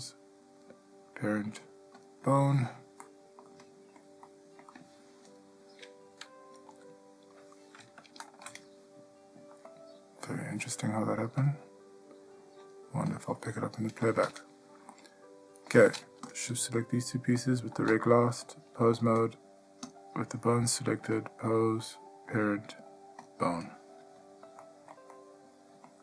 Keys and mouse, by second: 3.2-3.6 middle drag, 3.8-4.2 ctrl+middle drag, 4.4-4.8 middle drag, 6.9 g, 9.9-10.8 ctrl+middle drag, 11.6 click, 12.8-13.3 drag, 15.1-15.9 middle drag, 18.7-19.2 drag, 21.5-23.5 drag, 24.8 ctrl+middle drag, 25.3-26.0 middle drag.